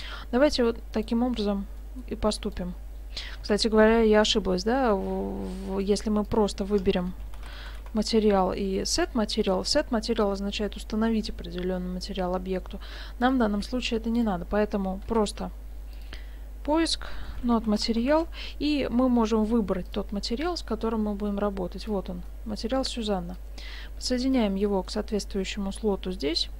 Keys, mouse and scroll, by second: 0.9 click, 1.4 x, 1.8 middle click, 2.4 right click, 3.4 shift+a, 13.3 click, 13.6 x, 14.2 click, 15.1 shift+a, 20.4 click, 22.3 middle click, 23.3 click, 24.6 middle click.